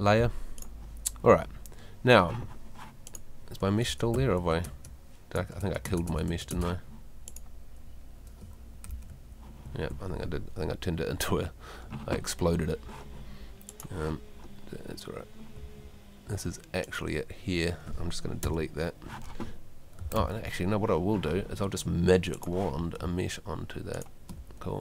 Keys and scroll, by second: 3.8 Tab, 15.6 Home, 18.4 BackSpace, 23.0 space.